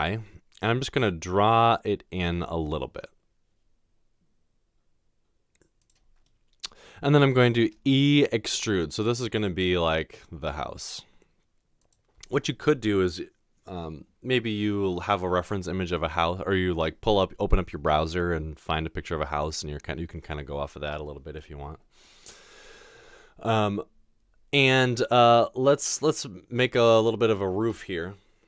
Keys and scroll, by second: 7.8 e.